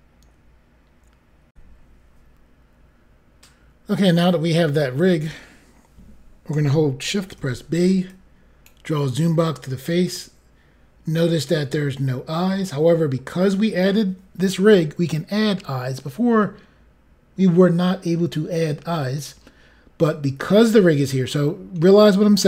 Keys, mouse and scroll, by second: 1.5 Pause, 2.6 Insert, 7.3 b, 8.0 click, 9.7 scroll up 2, 10.6 scroll up 2, 11.3 middle click, 16.6-17.0 scroll down 5.